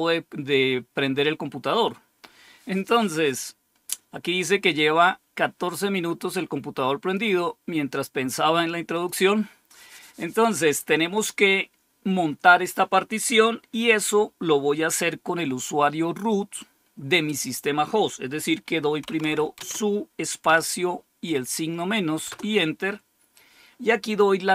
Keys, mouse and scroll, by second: 5.7-7.1 drag, 8.8 click, 18.7-20.3 typing, 22.2 typing.